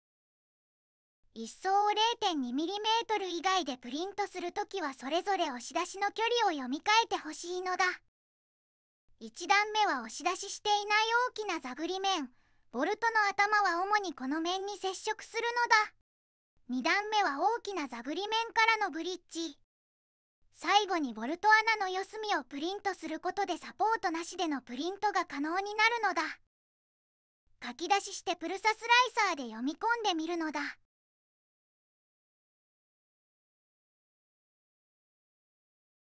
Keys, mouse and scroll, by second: 0.2 middle click, 2.9 right click, 4.8 middle click, 15.9 middle click, 21.3 middle click, 29.6 middle click, 30.7 right click, 32.8 middle click, 32.9 click.